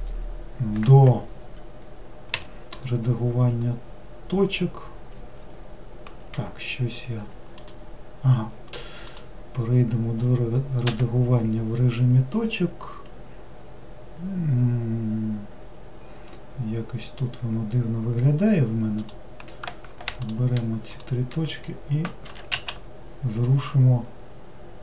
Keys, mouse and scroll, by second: 7.6 click, 9.1 click, 10.9 1, 19.0 click, 20.2 shift+click, 20.9 shift+click, 22.3 g.